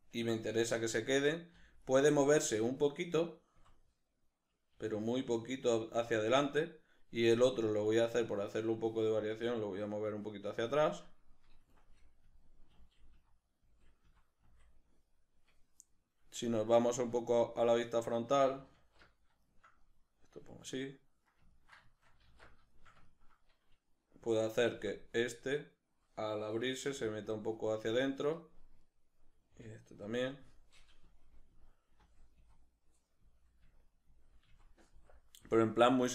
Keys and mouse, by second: 0.9 Right, 1.6 Left, 2.7 right click, 3.6 Right, 4.7 g, 6.2 shift+click, 7.9 right click, 9.3 g, 10.3 click, 11.8 Left, 12.3 Right, 12.7 Left, 13.1 Right, 13.7 Left, 14.1 Right, 14.5 Left, 15.9-27.9 middle drag, 19.0 alt+q, 22.2 alt+q, 24.7 Right, 26.9 g, 27.9 click, 28.9 right click, 29.5 g, 30.2 click, 31.1 Left, 31.5 Right, 32.0 Left, 32.4 Right, 33.2 Left, 33.7 Right, 34.1 Left, 34.5 Right, 34.9 Left, 35.5 Right.